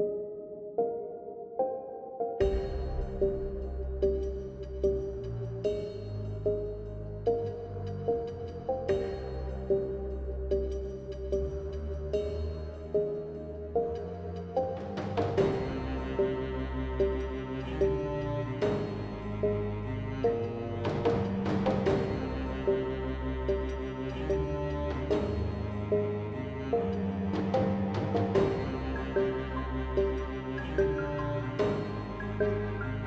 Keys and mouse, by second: 0.7 Tab, 1.8 ctrl+Tab, 2.1-2.4 drag, 2.4 ctrl+x, 3.7 g, 4.2 g, 4.4 g, 4.7 g, 5.5 ctrl+z, 5.9 ctrl+z, 5.9 g, 6.4 Tab, 8.2-8.7 middle drag, 8.7 ctrl+x, 9.3 ctrl+x, 9.5 Tab, 10.4 Tab, 10.6 Tab, 11.4-12.1 typing, 12.4 ctrl+s, 14.0 alt+c, 14.3 Tab, 14.8-16.2 typing, 15.9 Tab, 17.2 Tab, 17.4 Tab, 17.6 drag, 17.6 Tab, 17.7 middle click, 18.0 Tab, 18.2 a, 18.3 Tab, 18.5 Tab, 18.6 Tab, 19.0 Tab, 19.5-21.6 typing, 27.9 KP_0, 29.2 KP_0, 30.6 shift+space, 30.9 Tab, 31.4 KP_Divide, 32.0 ctrl+Tab, 32.5 z.